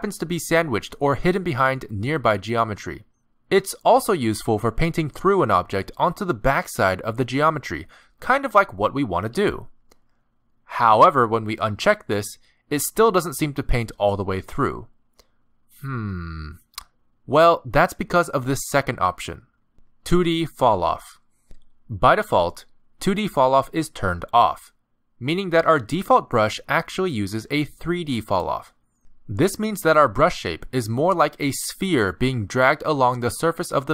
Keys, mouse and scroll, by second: 2.5 click, 3.5 middle click, 7.1 middle click, 7.9 click, 9.3 click, 11.3 middle click, 12.6 click, 13.5 middle click, 28.6 middle click, 28.6 scroll up 2, 28.6 f, 29.3-30.6 click, 30.7 middle click, 32.3 scroll down 3, 32.5 middle click, 33.4 f.